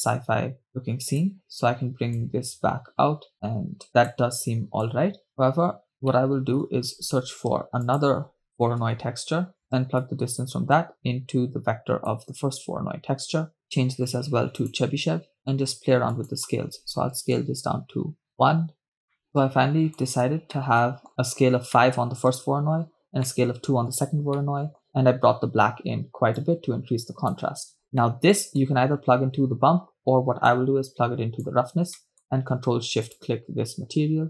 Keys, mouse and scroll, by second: 0.7-1.5 drag, 2.2-4.2 drag, 4.9-6.2 drag, 6.2 middle click, 7.1 shift+a, 10.4-12.7 drag, 13.8-15.3 drag, 15.4-16.2 scroll up 4, 17.1-18.5 drag, 18.5 BackSpace, 19.2 middle click, 19.4-20.2 drag, 20.7 shift+middle click, 21.4 scroll down 2, 21.8-22.9 middle drag, 23.5 middle click, 24.6 middle click, 26.8-27.8 drag, 28.0 scroll down 2, 28.1-29.1 middle drag, 30.6-31.5 drag, 32.1 middle click, 33.5 ctrl+shift+click.